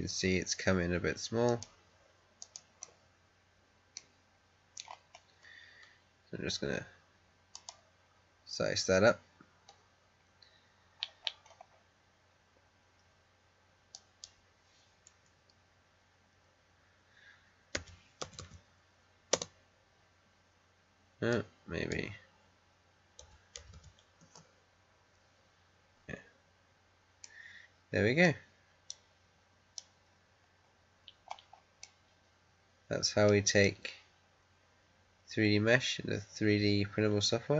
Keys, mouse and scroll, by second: 0.5 scroll down 1, 1.3 click, 2.7-4.2 middle drag, 4.2 scroll up 1, 5.1-6.1 scroll up 1, 7.4 click, 10.6 scroll down 1, 13.8 click, 17.7 typing, 19.3 Return, 21.2-23.1 drag, 23.1 typing, 24.1 Return, 27.1-28.8 middle drag, 28.8 right click, 30.0 scroll up 1, 31.7-33.5 middle drag, 33.5-37.5 right drag.